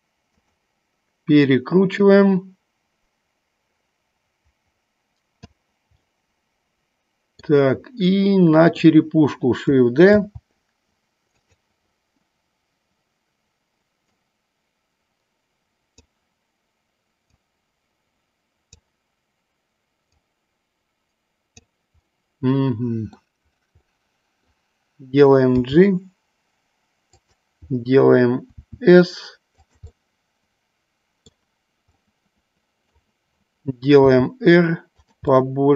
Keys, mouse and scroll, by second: 0.4 drag, 1.9-5.6 drag, 6.1-7.7 middle drag, 8.2-9.1 middle drag, 10.4 shift+d, 11.4 click, 14.1-16.1 drag, 17.4-18.8 drag, 20.2-21.9 drag, 22.2-23.3 middle drag, 24.1 middle click, 25.6 g, 27.2 click, 28.6 s, 29.9-31.4 middle drag, 32.1-33.0 middle drag, 34.0 r, 35.2 click, 35.4-35.7 middle drag.